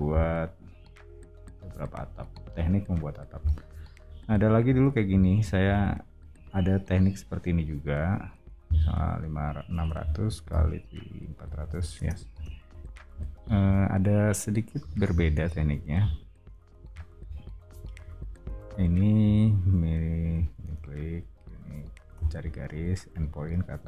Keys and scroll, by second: 5.7 r, 9.5-13.3 typing, 14.5-15.7 typing, 16.8 o, 17.9 l, 20.6 space, 22.1 m.